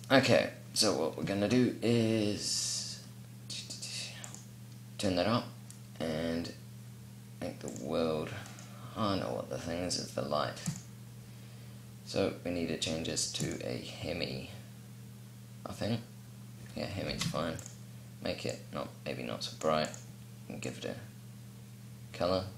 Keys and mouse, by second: 1.8-8.1 drag, 8.1-10.3 right drag, 10.3-12.2 drag, 13.2-16.8 drag, 16.8 g, 18.1-22.5 drag.